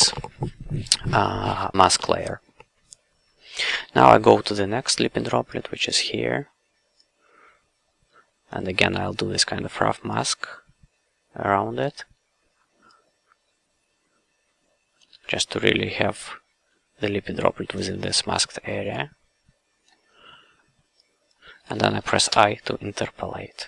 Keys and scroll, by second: 8.9 f, 11.8 f, 15.1 f, 17.7 f, 19.9 f, 22.2 i.